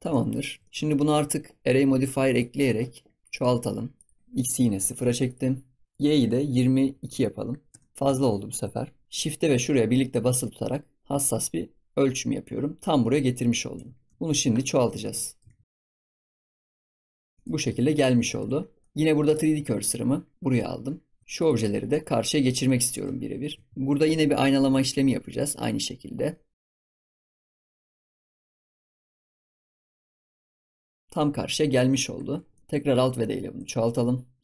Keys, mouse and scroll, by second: 0.1 ctrl+s, 0.4 shift+middle drag, 0.7 scroll down 4, 0.8 shift+middle click, 1.1-2.2 scroll up 1, 2.2-5.1 drag, 5.2-7.0 drag, 7.0 2, 7.9 scroll down 4, 8.1 ctrl+s, 8.5 KP_7, 9.0 shift+click, 10.0-13.1 shift+drag, 14.0 ctrl+s, 14.7 scroll down 1, 14.9-15.4 shift+middle drag, 15.4 ctrl+s, 15.7 click, 16.7 scroll down 1, 16.8 shift+middle click, 17.1 ctrl+s, 17.2 scroll down 1, 17.3-17.6 shift+middle drag, 17.6 ctrl+s, 17.9-18.4 middle drag, 18.4 ctrl+s, 18.8 middle click, 19.2 click, 19.7 shift+s, 21.3 click, 21.9-23.3 middle drag, 23.3 ctrl+s, 23.7 middle click, 23.9 ctrl+s, 24.6-24.9 middle drag, 24.9-25.2 scroll up 3, 25.2-26.9 shift+middle drag, 26.9-28.4 right drag, 28.4 middle click, 28.5 scroll down 1, 28.6-28.9 shift+middle drag, 31.0-32.1 middle drag, 32.5 middle click.